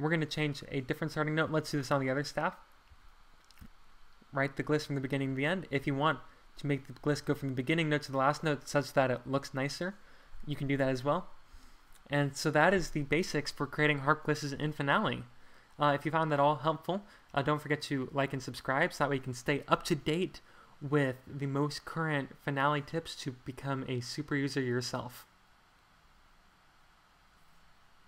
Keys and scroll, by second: 2.9 ctrl+a, 5.7 super+z, 11.5 Home.